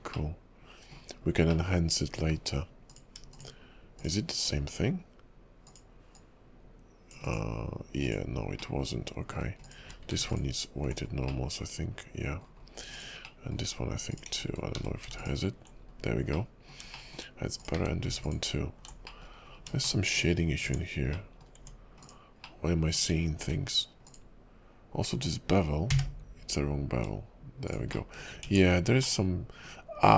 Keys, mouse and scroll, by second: 0.3 middle click, 1.3-1.6 scroll down 3, 1.6 middle click, 2.9 click, 3.3 shift+click, 4.0 shift+click, 5.6 click, 8.0 click, 8.7 middle click, 9.6 click, 9.8 q, 11.1-11.5 scroll up 3, 11.5 middle click, 12.6 scroll down 3, 13.0 click, 13.4 middle click, 14.1 click, 14.7 q, 15.9 scroll up 3, 16.5 middle click, 17.1 shift+middle click, 17.6 click, 17.8 q, 19.2 middle click, 19.5-20.9 scroll up 7, 20.0 shift+middle click, 20.7 Tab, 21.3 middle click, 21.6 Tab, 22.0 click, 22.6 middle click, 23.4 q, 28.1 shift+middle click, 28.4 Tab, 29.2 middle click.